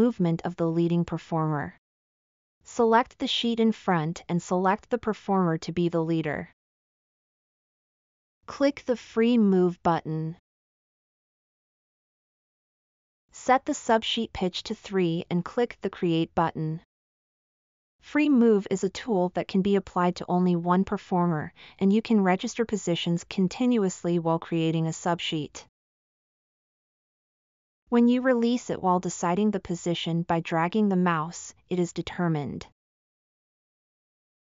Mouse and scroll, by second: 0.3-1.3 middle drag.